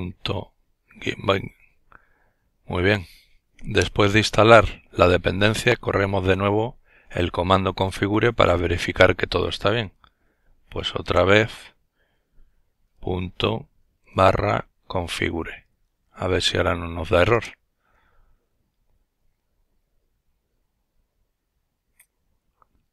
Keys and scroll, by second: 8.1 typing, 11.4-15.4 typing, 15.7 Return, 17.2 typing.